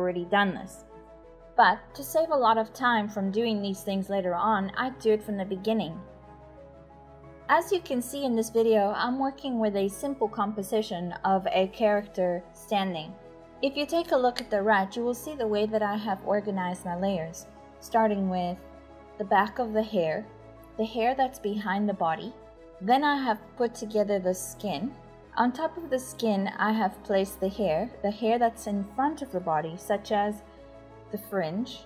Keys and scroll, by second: 14.8 ctrl+z, 31.7 /.